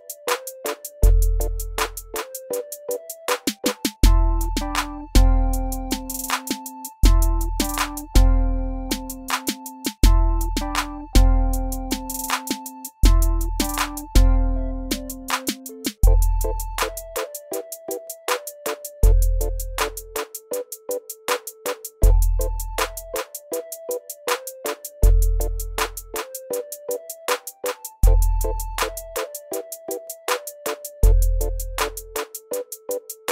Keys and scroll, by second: 0.4 ctrl+alt+-, 9.7 alt+w, 10.1 alt+w, 15.9 alt+w, 15.9 r, 17.8 w, 19.4 alt+w, 23.1 alt+w, 25.8 ctrl+z, 29.4 r.